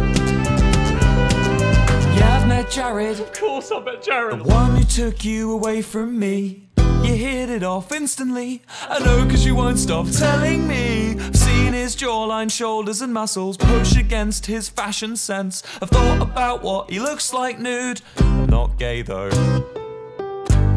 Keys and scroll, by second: 0.4 d, 11.8 s, 13.8 shift+p.